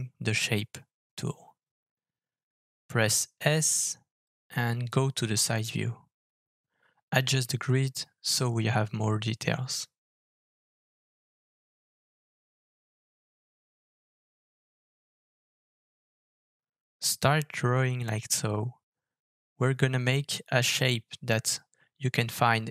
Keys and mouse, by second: 6.1-22.7 middle drag, 9.3 KP_3.